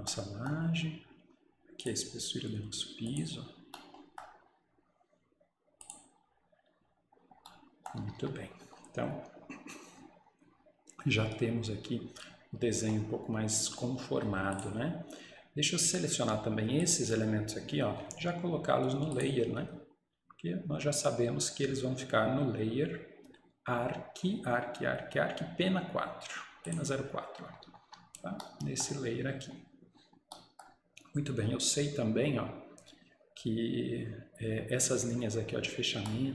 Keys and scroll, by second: 8.1 Escape, 8.3 Escape, 27.7 Escape, 28.0 Escape.